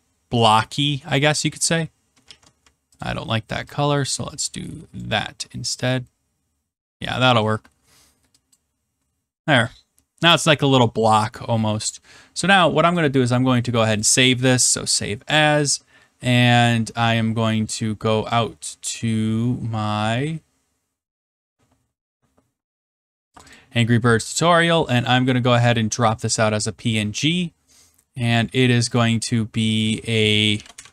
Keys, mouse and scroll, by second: 1.3 click, 2.2 ctrl+z, 2.9 ctrl+click, 4.9 click, 5.9 middle click, 6.0 middle click, 6.7 middle click, 7.4 middle click, 7.5 middle click, 7.6 middle click, 8.5 click, 9.0 middle click, 9.4 middle click, 10.3 middle click, 12.9 click, 14.0 click, 18.3 click, 20.3 scroll up 1, 20.5 scroll down 2, 21.4 scroll down 3, 23.3 click, 23.5 click, 28.9 click, 29.8 click, 30.3-30.9 typing.